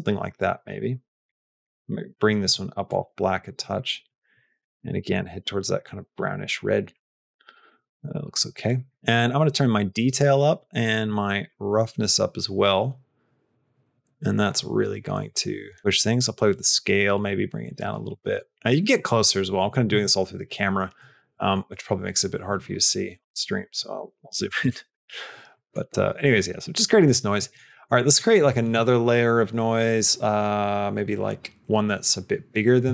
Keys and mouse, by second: 0.4 click, 1.1 click, 1.5 click, 2.3 click, 2.8 click, 5.9 click, 9.5 click, 11.0-18.2 drag, 19.9 q, 25.5 middle click, 27.2 middle click, 27.7 middle click, 28.0 middle click.